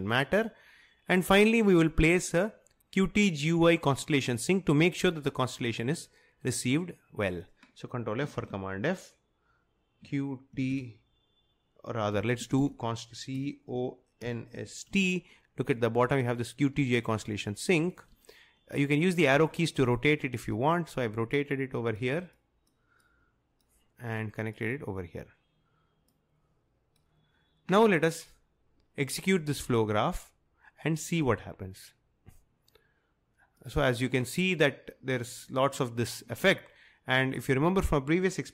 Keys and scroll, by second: 8.4 ctrl+f, 10.1-10.7 typing, 12.2-15.4 typing, 19.5 Right.